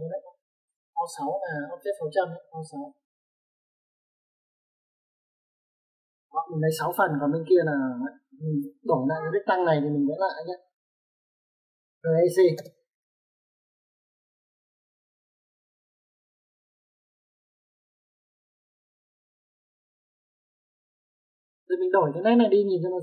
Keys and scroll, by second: 0.2 Escape, 0.4 typing, 3.1-4.5 typing, 7.3 space, 10.7 e, 10.8 space, 12.7 r, 12.9 e, 13.1 c, 13.2 space, 20.4 Escape, 21.8 typing.